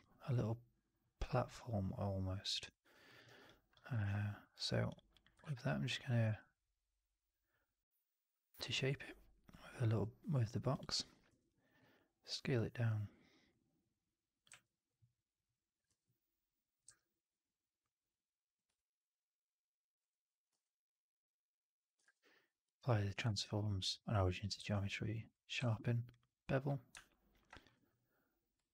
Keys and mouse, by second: 2.7 alt+drag, 3.0 alt+middle drag, 3.1 alt+right drag, 3.3 alt+click, 3.9 shift+Tab, 5.3 shift+Tab, 6.1 q, 12.5 r, 14.4 w, 15.8 r, 16.7 w, 18.7-19.9 alt+drag, 20.4 q, 21.9 shift+Tab, 23.1 shift+Tab, 24.5 q, 25.5 q.